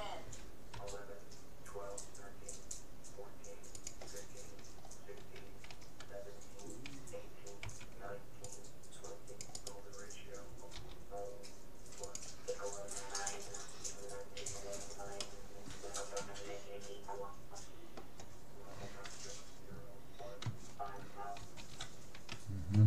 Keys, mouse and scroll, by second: 0.8 r, 4.8-6.4 middle drag, 5.7 a, 7.6 c, 9.6-11.4 right drag, 10.8 g, 14.2-17.0 middle drag, 21.4 ctrl+z.